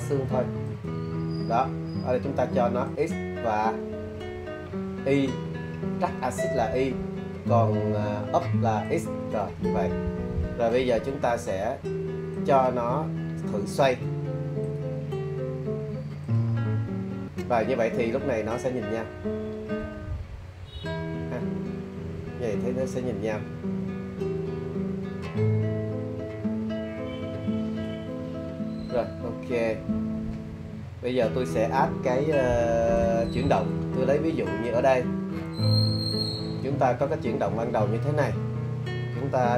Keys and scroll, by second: 35.8 super+z.